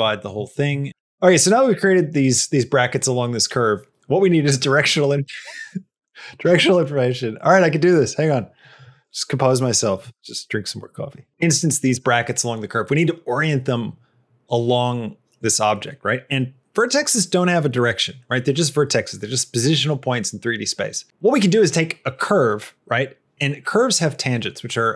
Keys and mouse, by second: 0.3 shift+middle click.